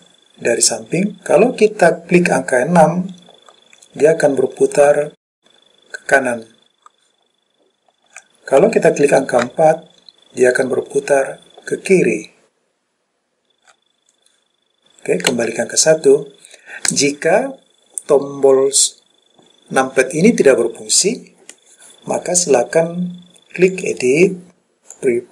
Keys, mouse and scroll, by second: 2.9-3.8 KP_6, 4.2-5.1 KP_6, 5.4-8.3 KP_6, 9.5-13.8 KP_4, 15.4 KP_1, 23.8-25.2 drag.